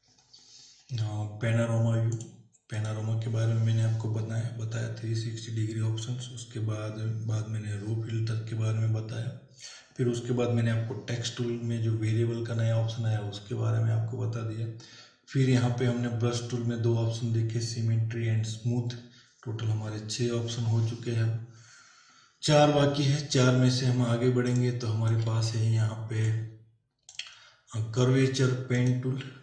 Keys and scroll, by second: 24.3 space.